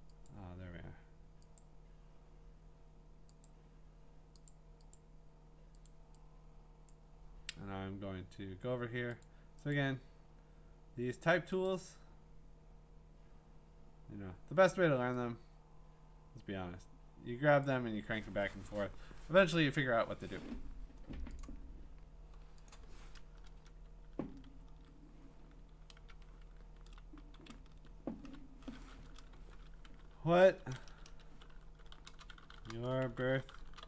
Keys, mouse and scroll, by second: 0.3 click, 1.6 click, 3.4 click, 4.5 click, 4.9 click, 5.9 click, 6.9 click, 9.2 click, 9.8 click, 11.7 click, 13.0-14.7 drag, 17.6-20.7 drag, 21.4 click, 22.7 click, 23.5 Return, 24.4 ctrl+v, 26.0 Return, 26.7 Down, 27.5 Up, 27.7 Down, 28.2 Down, 29.4-33.8 typing.